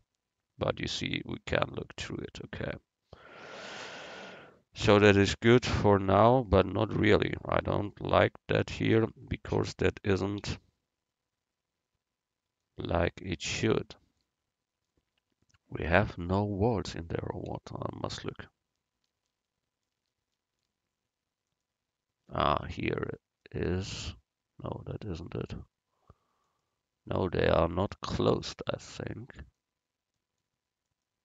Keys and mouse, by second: 3.3-5.2 drag, 9.1 Tab, 10.4 x, 17.5 z, 20.7 right click, 21.5-23.4 right drag, 26.6-28.3 middle drag, 30.2-31.2 middle drag.